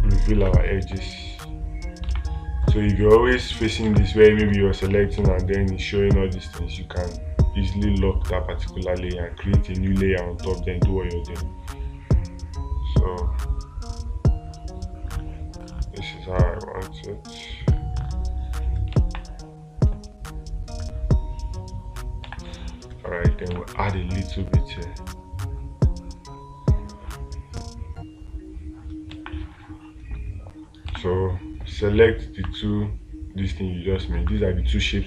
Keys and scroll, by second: 0.9 space, 2.5 space, 4.3 space, 22.7 space, 23.9 space, 31.3 space.